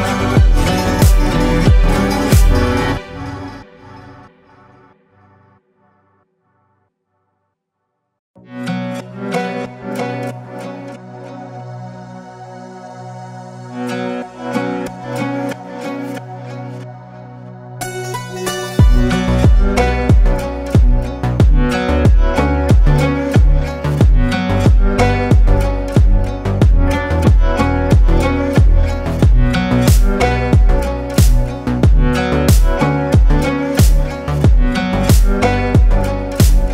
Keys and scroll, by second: 13.7 ctrl+alt+3.